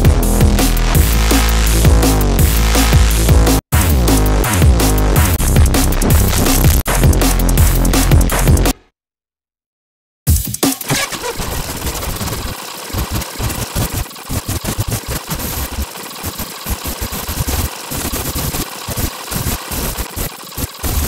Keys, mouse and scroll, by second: 3.5 click, 5.3 click, 6.8 click, 8.5 space, 9.9 click, 10.1-20.0 typing, 11.3 scroll down 2, 11.5 click, 12.1 click, 12.6 click, 12.8 scroll up 1, 13.0 click, 13.3 click, 13.4 click, 13.6 alt+click, 13.8 alt+click, 14.1 click, 14.5 click, 14.7 click, 14.9-15.2 scroll down 3, 15.8 click, 15.9 Delete, 16.0 click, 16.9 click, 17.2 click, 17.7 alt+click, 18.0 click, 18.2 scroll down 2, 18.3 click, 19.4 scroll up 2, 19.6 alt+click, 19.8 right click, 19.9 click, 20.1 ctrl+click, 20.3 right click, 20.4 Delete, 20.4 ctrl+click, 20.6 click, 21.0 right click.